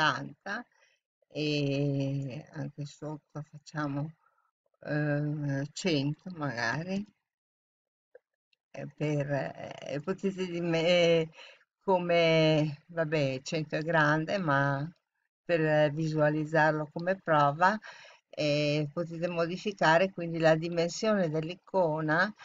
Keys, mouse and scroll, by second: 3.1-6.9 drag, 6.9 0.